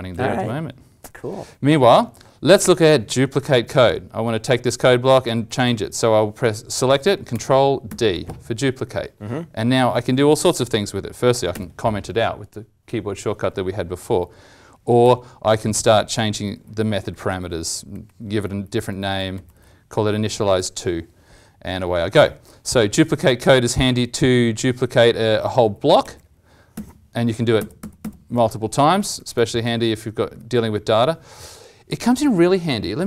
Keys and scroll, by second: 7.8 ctrl+d, 11.5 ctrl+/, 15.0 ctrl+/, 16.9 ctrl+Right, 17.0 ctrl+Right, 17.2 ctrl+Right, 17.5 ctrl+Right, 17.9 ctrl+Right, 18.9 ctrl+Left, 19.0 ctrl+Left, 19.3 ctrl+Left, 19.5 ctrl+Left, 20.0 ctrl+Right, 26.7 ctrl+d, 27.5 ctrl+d, 27.7 ctrl+d, 27.9 ctrl+d, 28.9 ctrl+z, 29.1 ctrl+z, 29.3 ctrl+z, 29.5 ctrl+z, 30.2 ctrl+z.